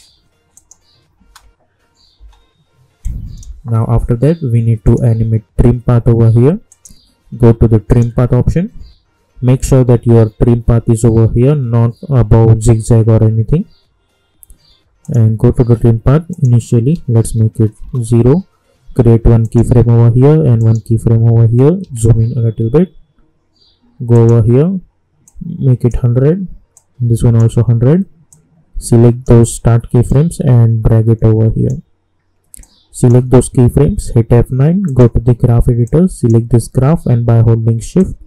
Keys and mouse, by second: 0.5 click, 1.2 space, 3.0-4.8 drag, 15.0 click, 17.8 Return, 19.4 click, 21.8 =, 24.1-33.8 drag, 33.8 F9, 34.8-38.2 drag.